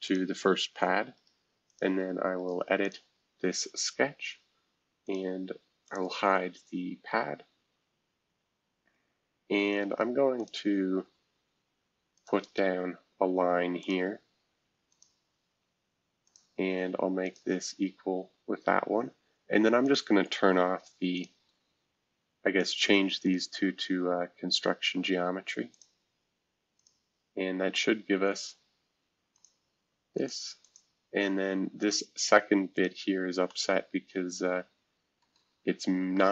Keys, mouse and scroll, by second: 0.0-1.1 drag, 1.1 right click, 1.7 click, 2.4 right click, 2.8-4.4 drag, 5.0-7.4 drag, 7.4 scroll down 4, 10.4 click, 12.1 click, 13.8 click, 14.9 click, 15.4 Escape, 16.2 click, 17.2 shift+click, 17.6 e, 19.8 click, 21.1 shift+click, 22.5 click, 23.2 click, 25.7 click, 26.8 click, 29.3 click, 30.1 click, 30.6-33.4 drag, 33.4-36.3 middle drag, 35.6-36.3 scroll down 2.